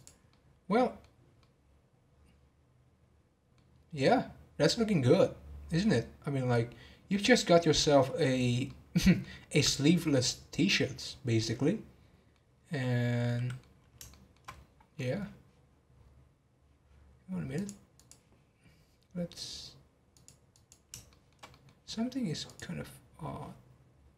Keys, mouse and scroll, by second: 0.3-4.4 middle drag, 7.5-12.6 middle drag, 12.6 scroll down 2, 12.8-14.5 middle drag, 14.5-14.9 scroll up 7, 14.9 middle click, 15.6-17.5 scroll down 1, 17.5 click, 17.9 click, 20.1 click, 20.5 click, 21.1-22.4 shift+middle drag, 22.4 click.